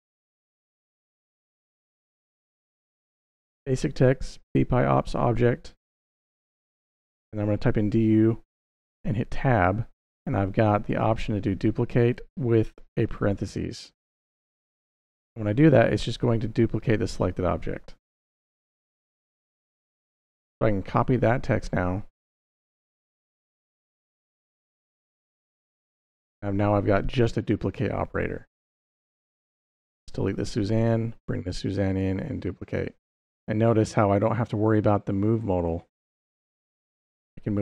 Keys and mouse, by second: 0.0-1.1 typing, 2.1-2.8 typing, 6.0 ., 6.4 d, 6.5 u, 7.1 Tab, 13.7 shift+9, 14.8 Tab, 18.2 shift+0, 20.0-21.4 drag, 22.4 ctrl+c, 23.6 click, 29.7 x, 30.6 click, 31.7 click, 35.5 g, 36.6 right click, 37.2 g.